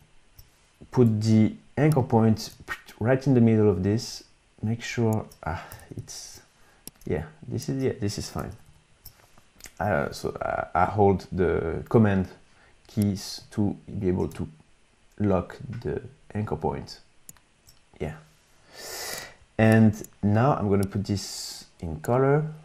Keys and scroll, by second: 1.1 y, 5.8 super+=, 6.0 super+=, 8.5 super+-.